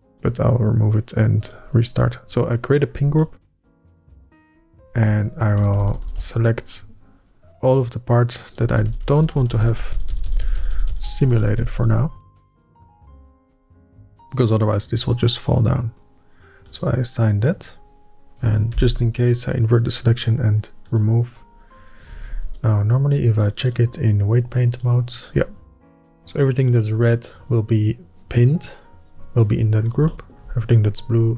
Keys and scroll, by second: 6.4 ctrl+KP_Add, 6.5 ctrl+KP_Add, 6.7 ctrl+KP_Add, 6.8 ctrl+KP_Add, 6.9 ctrl+KP_Add, 7.1-9.3 ctrl+KP_Add, 9.5 ctrl+KP_Add, 9.6 ctrl+KP_Add, 9.8 ctrl+KP_Add, 9.9 ctrl+KP_Add, 10.2 ctrl+KP_Add, 10.4 ctrl+KP_Add, 10.5 ctrl+KP_Add, 10.7 ctrl+], 10.9 ctrl+], 11.0 ctrl+], 11.2 ctrl+KP_Add, 11.4 ctrl+KP_Add, 11.5 ctrl+KP_Add, 11.7 ctrl+KP_Add, 11.8 ctrl+KP_Add, 12.0 ctrl+KP_Add, 12.2 ctrl+KP_Add, 12.3 ctrl+KP_Add, 12.5 ctrl+KP_Add, 13.0 ctrl+KP_Add, 19.6 ctrl+i, 22.9 alt+a, 23.2 Tab.